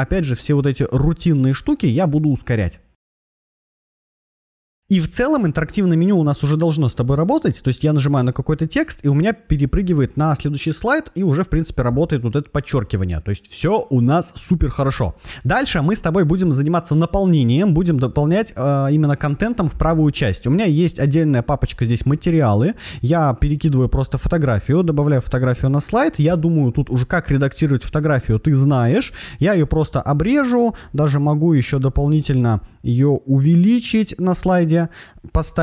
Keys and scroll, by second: 3.4 shift+super+v, 4.2 Right, 4.6 shift+super+v, 26.2 shift+super+m, 30.9 shift+super+m.